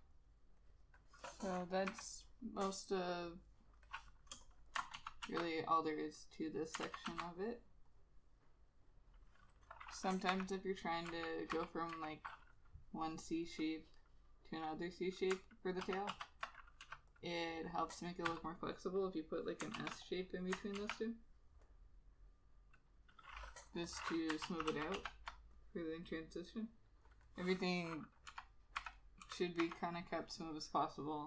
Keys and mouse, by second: 2.4 ], 4.5 space, 5.1 ctrl+z, 5.4 ctrl+z, 7.0 ctrl+z, 7.2 ctrl+z, 10.4 ], 11.2 [, 11.7 ], 12.0 [, 16.0 ctrl+z, 16.3 ctrl+z, 17.1 e, 18.4 b, 19.9 ctrl+z, 20.9 ctrl+z, 23.3 double click, 24.6 ctrl+z, 24.8 ctrl+z, 25.1 ctrl+z, 28.4 ], 28.9 ], 29.4 [, 29.7 ].